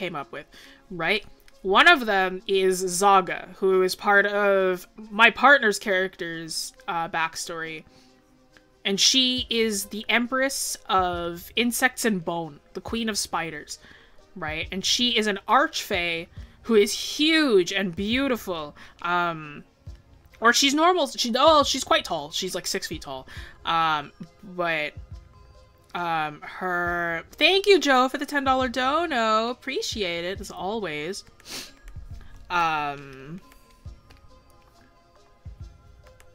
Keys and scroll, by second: 18.0 ctrl+z.